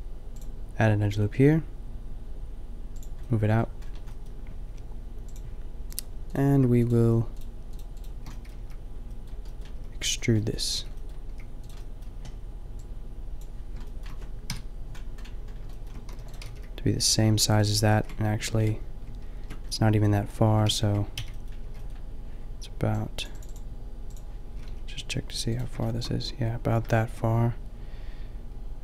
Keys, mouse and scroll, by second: 3.4-8.6 middle drag, 8.6 b, 9.6 middle click, 9.7 b, 11.3 b, 11.3 g, 12.6 middle click, 14.4 KP_5, 16.0 e, 16.4 g, 17.9 ctrl+z, 19.6 ctrl+z, 20.8 ctrl+z, 21.1 b, 21.5 b, 24.5 g.